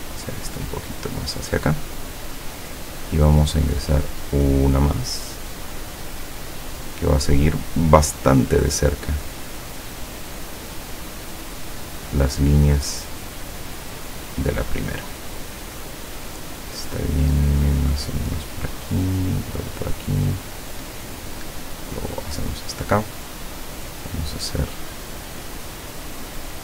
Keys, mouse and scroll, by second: 5.8 click, 9.2 click, 10.2 click, 11.5 click, 18.5 click, 20.2 click, 22.0 click, 23.9 click, 25.8 click, 26.5-26.6 drag.